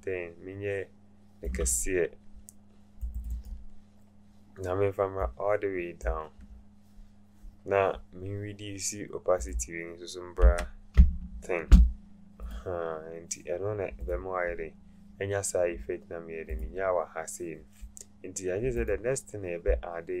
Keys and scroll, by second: 10.5 BackSpace.